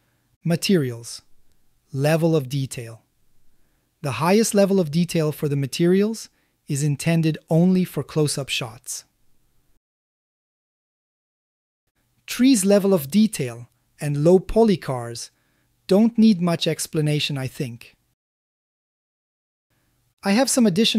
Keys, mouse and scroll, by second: 2.0-4.2 drag, 5.2-7.7 drag, 13.6 click, 14.9 click, 17.5 click, 18.3 click.